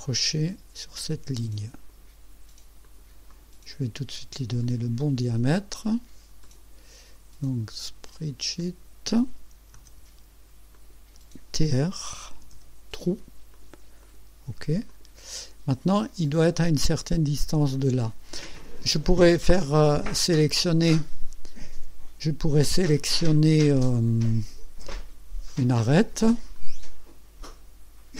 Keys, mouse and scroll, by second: 1.7 click, 2.8 click, 3.3 right click, 4.6 click, 6.4 click, 8.6 click, 9.7 s, 10.7 click, 12.1-13.0 typing, 13.5 click, 14.0 click, 14.9 click, 17.0-18.0 drag, 26.5 click.